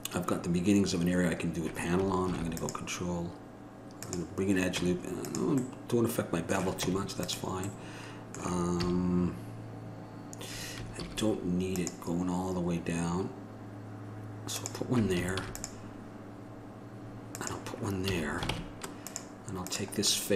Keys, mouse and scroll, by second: 2.5 ctrl+r, 5.0 Tab, 7.0 Tab, 9.0 a, 11.2 ctrl+r, 15.6 ctrl+r, 18.3 a, 18.7 ctrl+Tab, 19.9-20.3 drag.